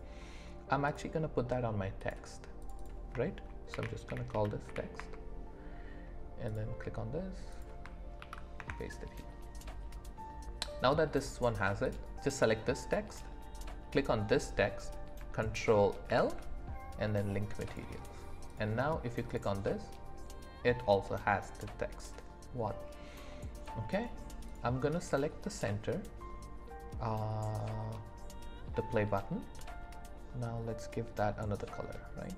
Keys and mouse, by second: 2.0 click, 2.6-5.0 drag, 11.8 click, 16.1 ctrl+l, 18.5 click, 23.1-23.8 middle drag, 24.5 click.